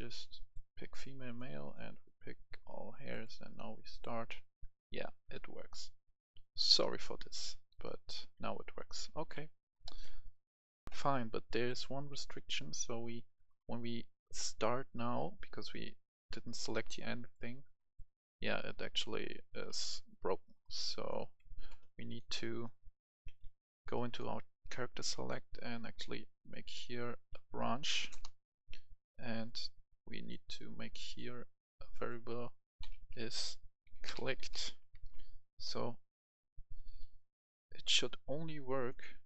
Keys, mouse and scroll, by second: 2.1 click, 5.8-6.3 typing, 7.8-10.0 typing, 9.7 click, 10.0 Escape, 10.8 F11, 10.8 F10, 11.6-20.5 drag, 20.8 click, 21.2 Escape, 22.0-23.5 drag, 23.9 right click, 25.1-26.5 drag, 27.8 typing, 28.0 Return, 29.1 click, 32.8-34.5 typing, 35.0 Return, 37.1-39.2 drag.